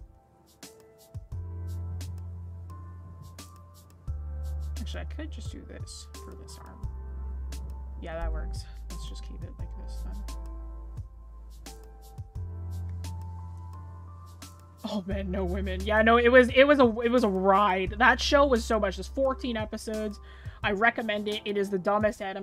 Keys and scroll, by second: 8.4 ctrl+z.